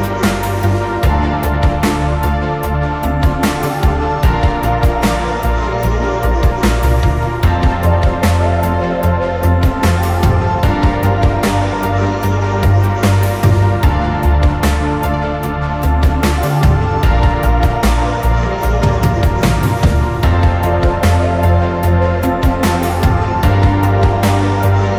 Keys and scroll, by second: 4.9 v, 23.5 3.